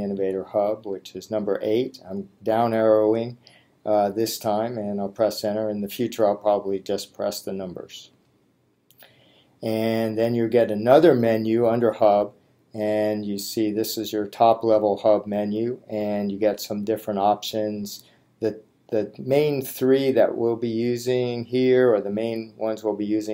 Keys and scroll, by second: 8.1 Return, 22.7 Right.